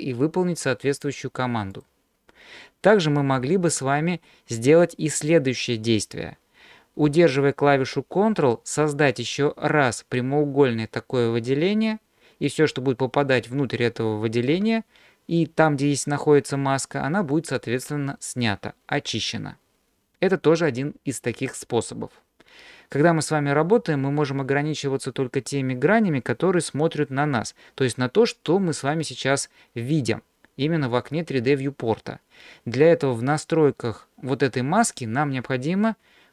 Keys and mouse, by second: 3.5 ctrl+z, 9.3-14.5 ctrl+drag.